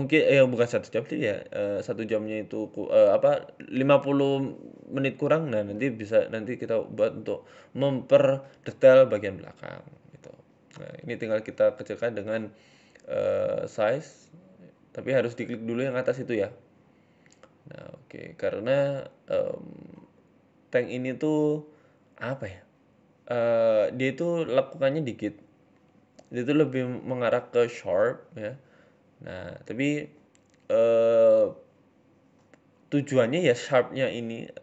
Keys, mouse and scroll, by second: 3.9 s, 6.4 s, 9.6-10.3 scroll up 5, 9.9 shift+middle click, 10.3 s, 12.5 ctrl+z, 12.9 s, 14.9 s, 17.5-18.5 scroll down 5, 17.7 Tab, 18.5 shift+middle click, 18.5 scroll down 1, 18.8 scroll up 3, 18.9 Tab, 19.1 shift+middle click, 19.5 click, 20.1 s, 22.7 click, 23.5 s, 27.3 click, 27.6 s, 28.9 shift+middle click, 29.3 click, 30.2 click, 30.7 s, 32.0 click, 32.4 s, 33.6 shift+middle click, 33.9-34.3 scroll up 2, 34.3 click.